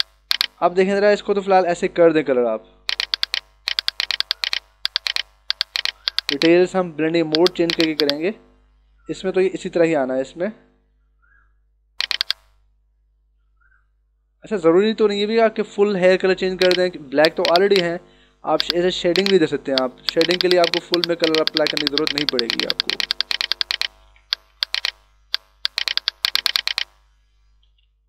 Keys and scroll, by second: 24.4 h, 27.8 [.